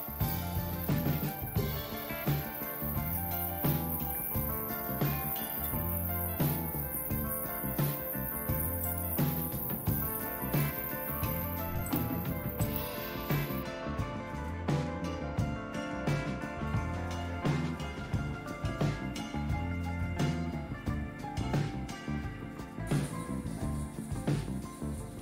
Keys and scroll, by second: 1.0-3.1 typing, 5.6 Return, 22.5-25.2 typing.